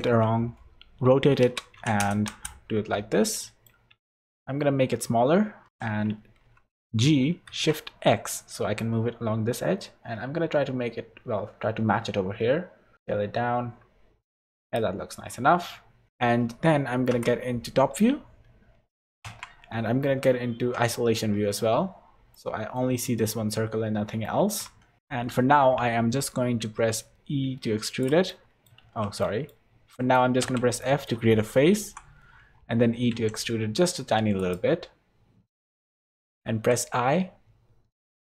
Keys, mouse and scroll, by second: 3.1 scroll down 4, 3.3 middle click, 3.9 Tab, 4.2 s, 5.7 g, 12.9 s, 17.1 KP_7, 19.2 Tab, 20.5 /, 21.8-22.3 scroll down 5, 22.3 middle click, 23.0 middle click, 24.4 Tab, 25.0 middle click, 25.0 KP_7, 25.6 scroll up 2, 26.3 scroll up 1, 26.6 e, 28.3 middle click, 28.8 ctrl+z, 29.2 middle click, 29.9 middle click, 30.4 f, 30.8 middle click, 31.8 KP_7, 33.1 e, 35.5 middle click, 36.5 i.